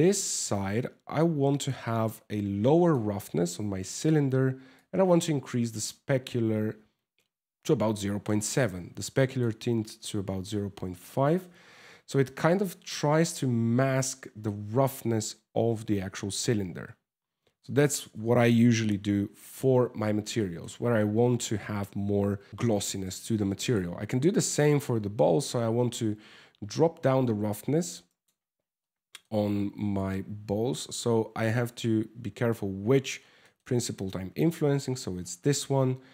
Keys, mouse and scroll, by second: 1.2 click, 4.5 click, 7.8 click, 10.1 middle click, 10.8 shift+middle click, 11.2-11.6 scroll up 10, 11.8 shift+middle click, 12.2-12.5 scroll up 2, 12.6 middle click, 13.6 shift+middle click, 16.4-17.2 scroll down 11, 17.2 middle click, 18.2 KP_0, 19.0 scroll up 5, 19.6 scroll down 2, 20.0 shift+middle click, 22.6 right click, 23.3 right click, 24.4 click, 28.2-28.6 scroll down 3, 28.6 middle click, 29.5 click, 33.1 middle click, 33.3 scroll up 3, 35.0-35.9 scroll up 1, 35.9 click, 35.9 scroll up 1.